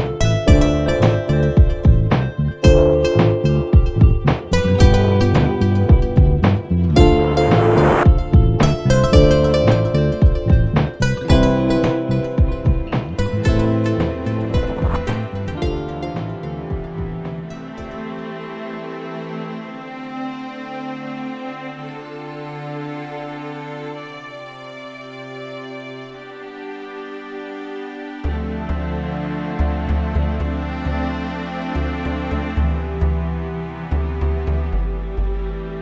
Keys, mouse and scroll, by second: 2.4 scroll down 1, 3.0 scroll up 1, 3.6-3.9 scroll down 1, 4.9 click, 6.1 click, 7.2 click, 8.5 click, 9.2 click, 10.2 click, 11.5 click, 12.4 click, 13.0 click, 14.3 click, 15.3 click, 16.3-18.0 drag, 18.5 scroll down 1, 19.1 scroll up 1, 21.4 scroll down 1, 21.9 scroll up 1, 22.3-24.1 drag, 24.2 scroll down 1, 24.7 scroll up 2, 25.8 click, 26.8 click, 28.8 click, 29.9 click, 30.5 click, 32.7 click, 34.6-35.8 drag.